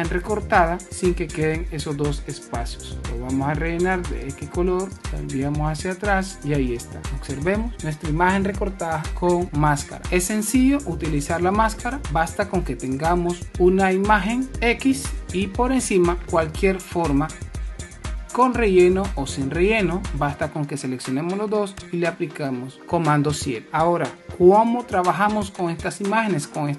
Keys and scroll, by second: 12.0 super+-, 13.4 shift+super+p, 16.1 super+space, 21.4 super+7, 24.5 super+-.